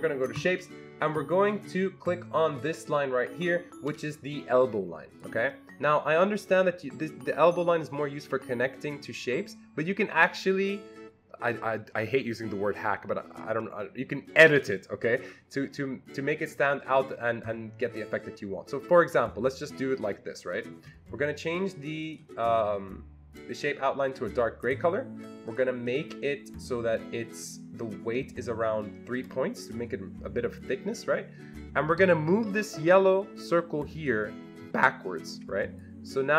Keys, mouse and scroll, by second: 0.3 click, 5.1 click, 6.4-24.6 drag, 24.6 click, 25.5 click, 25.9 click, 29.6 click, 34.0-36.3 drag.